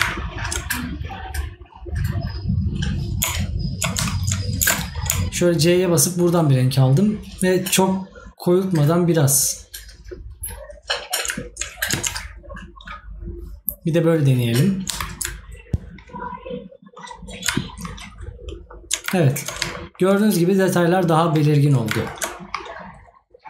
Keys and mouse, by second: 18.5 right click, 21.5 right click.